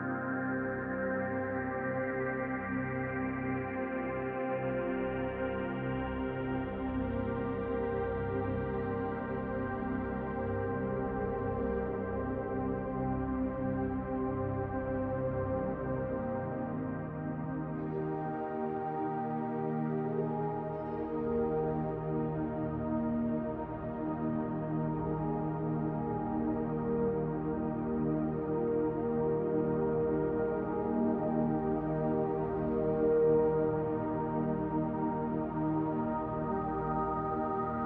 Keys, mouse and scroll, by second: 3.8-4.3 scroll down 2, 4.3 middle click, 4.6-5.2 scroll up 2, 5.2-13.3 drag, 6.7-7.7 scroll up 1, 12.9-13.2 scroll down 1, 13.3-18.4 shift+middle drag, 13.5 scroll down 1, 14.1-14.5 scroll up 1, 15.2-15.7 scroll up 1, 17.3-18.4 scroll up 1, 18.4-22.3 drag, 21.1 scroll up 1, 21.6 f, 28.7 click, 28.7 f, 31.4 click, 31.8-34.5 middle drag, 34.5 click, 34.8 scroll down 1, 35.0-37.8 middle drag, 36.4 ctrl+z, 37.1-37.5 scroll up 1, 37.7 scroll up 1.